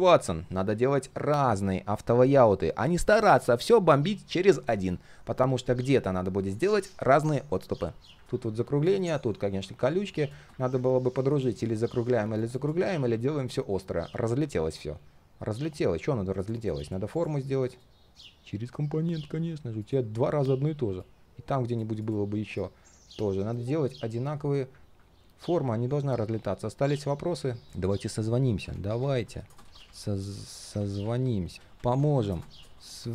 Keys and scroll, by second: 17.7 ctrl+shift+3, 23.4 ctrl+shift+3, 31.5 ctrl+a.